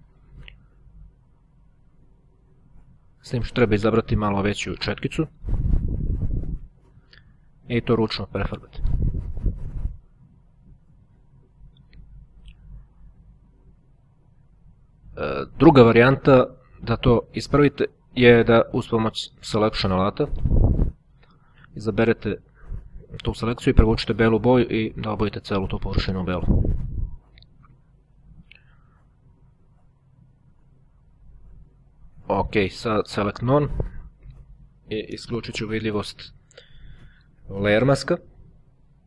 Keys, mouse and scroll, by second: 0.4 click, 1.7-2.8 drag, 3.7 click, 5.2-6.3 scroll down 1, 6.3 click, 7.1 click, 8.2 click, 18.7 ctrl+z, 20.5 click, 21.4-23.1 drag, 23.6-24.6 drag, 29.2-30.4 drag, 32.1 click, 32.9 click, 36.3 click, 38.4-39.0 drag.